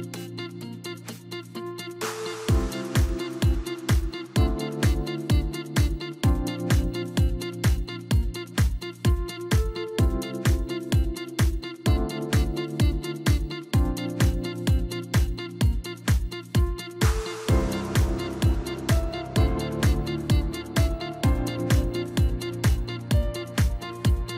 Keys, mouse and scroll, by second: 1.6 3, 2.2 middle click, 2.7 click, 3.4 KP_1, 4.2 s, 5.9 middle click, 6.5 click, 7.2 KP_1, 8.1 s, 10.0 Tab, 10.6-11.0 scroll up 1, 11.0 scroll down 1, 11.2 s, 12.5 scroll up 1, 13.4 click, 13.8-14.7 scroll up 1, 14.7 Tab, 16.7 click, 19.1 shift+click, 22.3 shift+click, 22.7 shift+click, 23.0 shift+click, 23.4 shift+click, 23.8 shift+click.